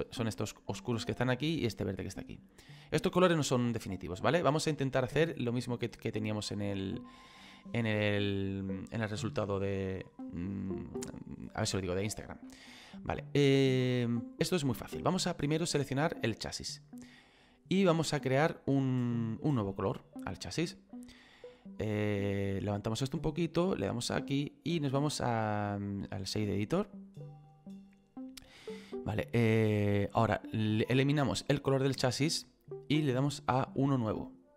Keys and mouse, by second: 4.2 middle click, 16.6 click, 19.9 click, 24.0 click, 25.5 click, 31.8 click.